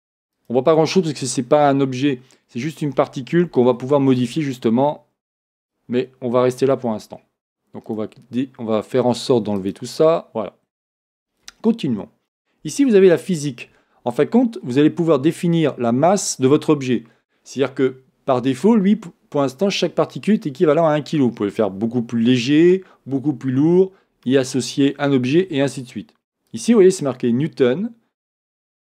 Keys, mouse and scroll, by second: 1.3 scroll down 2, 5.5 shift+middle click, 5.6 click, 7.9 click, 9.6-12.5 drag, 10.7-11.6 scroll down 1, 12.9-13.3 scroll down 1, 26.5 click.